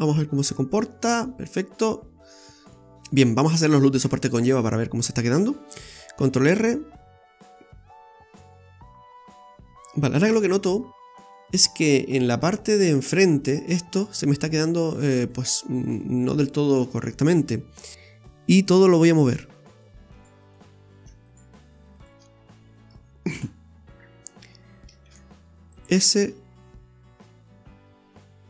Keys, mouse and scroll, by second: 0.4 Tab, 1.1 scroll up 1, 2.9-3.6 scroll up 3, 3.2 middle click, 4.0 Tab, 4.4 middle click, 6.2 ctrl+r, 9.9 scroll up 1, 10.3 KP_1, 11.1-11.8 scroll down 2, 15.6-16.1 scroll up 3, 18.6 alt+shift+right click, 19.7 right click, 20.1 alt+shift+right click, 20.4 right click, 21.2 shift+right click, 21.9 shift+right click, 22.3-22.9 scroll down 5, 22.8 middle click, 23.3 KP_1, 25.0 shift+s, 25.8 s.